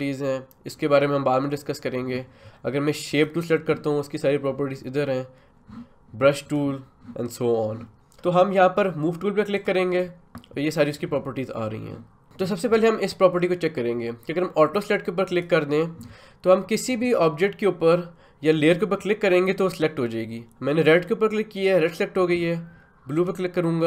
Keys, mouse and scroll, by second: 3.1 click, 6.4 click, 9.5 click, 15.3 click, 19.7 click, 23.2 click.